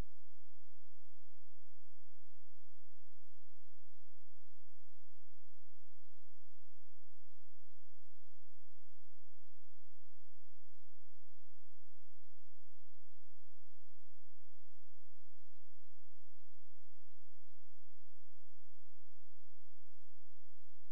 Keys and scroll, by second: 14.3 ctrl+z, 15.0 space.